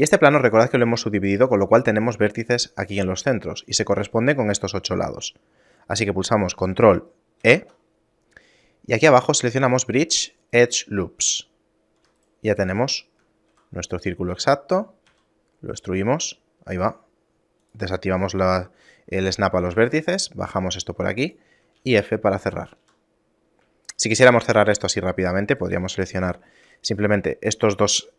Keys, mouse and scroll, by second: 7.5 ctrl+e, 12.3 alt+right click, 12.9 shift+middle click, 13.5 e, 14.4 e, 17.7 click, 19.7 g, 20.9 g, 21.9 f, 22.5 shift+middle click, 22.9 a, 23.3-23.9 scroll down 1, 23.9 shift+middle click, 24.5 ctrl+Tab, 25.3-25.6 scroll up 1, 25.6 right click, 26.3 shift+right click.